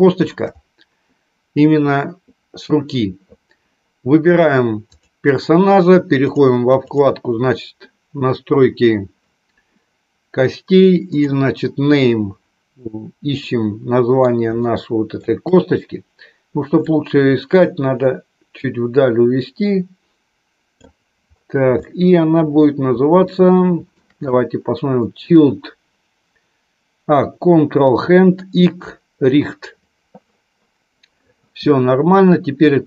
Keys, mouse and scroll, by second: 4.8-13.3 drag, 13.3 middle click, 14.4 shift+middle click, 17.1-21.1 drag, 21.7 shift+middle click, 23.2 shift+middle click.